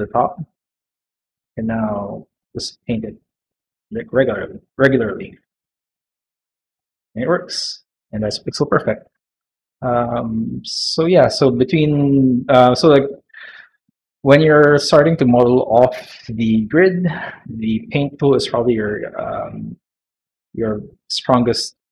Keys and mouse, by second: 0.1 click, 0.5 click, 0.9 middle click, 1.5 middle click, 1.8 shift+middle click, 2.6 middle click, 2.9 middle click, 4.2 middle click, 4.8 middle click, 5.3 shift+middle click, 5.6 middle click, 6.1 click, 6.4 click, 6.7 middle click, 7.6 middle click, 9.6 middle click, 10.1 shift+middle click, 10.6 middle click, 11.2 middle click, 11.6 middle click, 12.0 shift+middle click, 12.4 middle click, 20.6-21.9 middle drag.